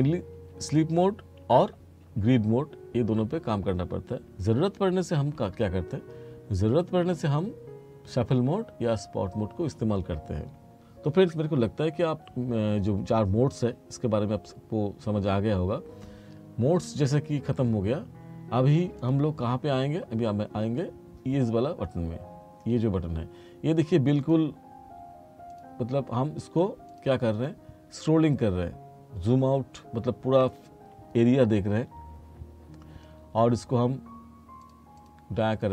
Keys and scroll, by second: 0.4 F2, 2.1 F4.